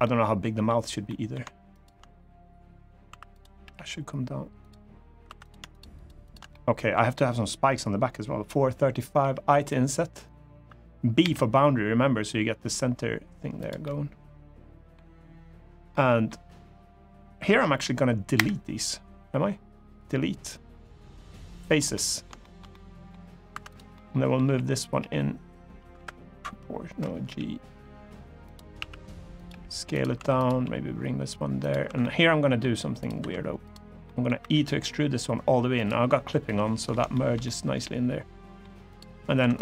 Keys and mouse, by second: 0.8 middle click, 3.4 1, 3.4 g, 4.3 click, 5.0 3, 5.4 shift+click, 6.0 shift+click, 6.2 middle click, 10.9 i, 10.9 b, 13.3 click, 13.6-14.7 middle drag, 15.6 middle click, 18.1 Delete, 21.7 middle click, 22.1 shift+middle click, 22.4 middle click, 23.7 middle click, 23.7 2, 24.2 g, 25.4 g, 25.7 Escape, 27.0 g, 28.2 click, 28.5 s, 29.1 click, 29.2 g, 29.6 click, 29.9 1, 30.1 click, 30.3 g, 31.3 click, 31.6 3, 31.7 middle click, 32.9 2, 33.8 middle click, 34.1 e, 35.5 click, 36.2 middle click, 36.8 shift+middle click, 37.2-38.3 middle drag, 39.3 click, 39.3 2.